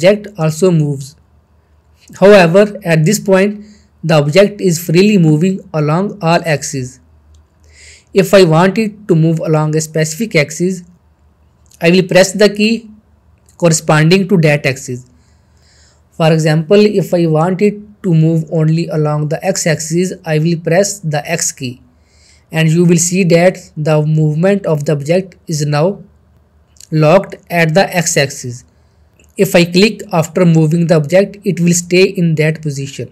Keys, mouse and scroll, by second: 19.9 x, 28.9 click, 29.8-30.4 middle click, 30.7-31.3 shift+middle drag.